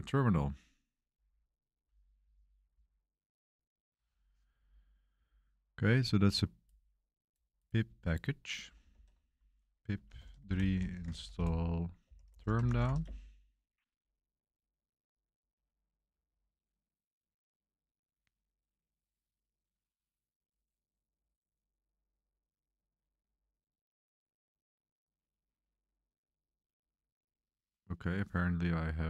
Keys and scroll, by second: 9.0 super+3, 9.6-13.3 typing.